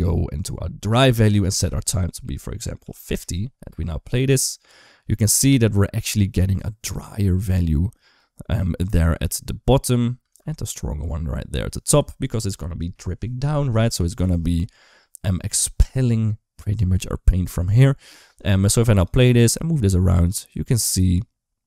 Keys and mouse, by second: 1.2-3.0 drag, 3.5 space, 10.0 space, 18.5 space, 18.9 click, 19.1 g.